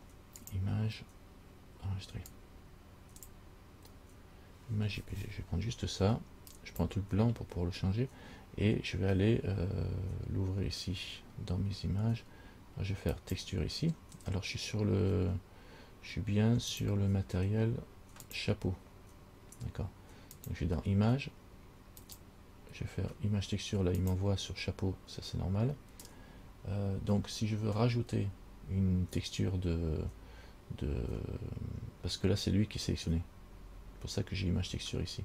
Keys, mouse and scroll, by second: 13.3 click, 16.9 click, 18.4 click, 20.6 click, 22.2 click.